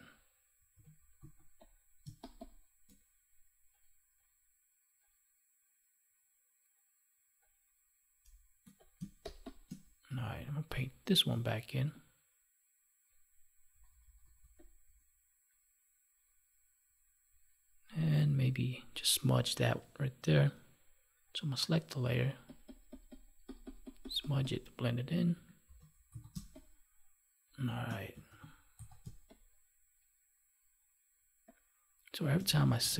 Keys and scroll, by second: 0.7 ctrl+s, 2.0 space, 8.2 space, 25.3 ctrl+1, 26.3 space, 29.0 space, 32.8 ctrl+s.